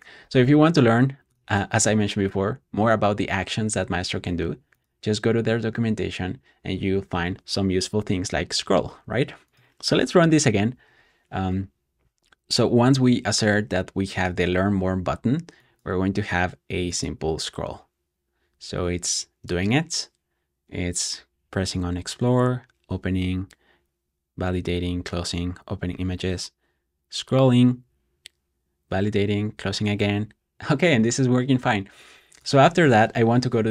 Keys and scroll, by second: 10.6 Return, 21.2 typing.